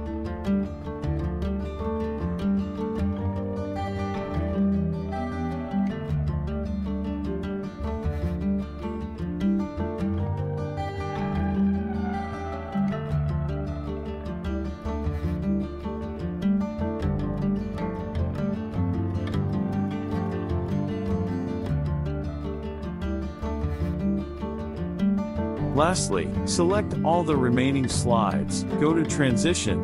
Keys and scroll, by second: 0.9 ctrl+z, 11.8 ctrl+c, 13.2 ctrl+v.